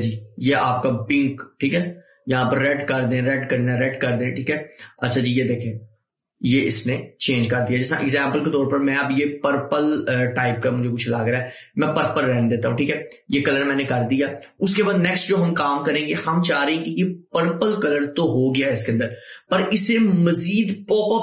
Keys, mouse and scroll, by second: 14.5 click.